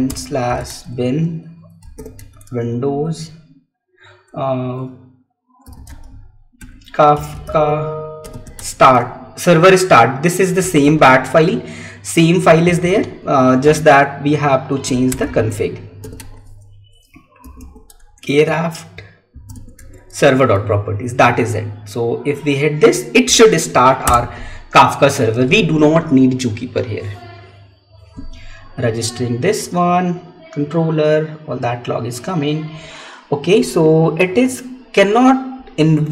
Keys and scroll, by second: 0.5 Tab, 2.0 Tab, 8.9 Tab, 11.0 Tab, 12.7 Tab, 13.5 space, 16.2 Tab, 17.8 Tab, 20.3 Tab.